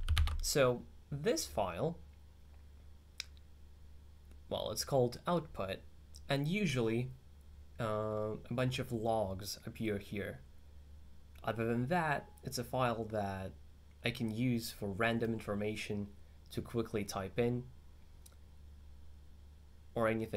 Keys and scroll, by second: 0.3 alt+2.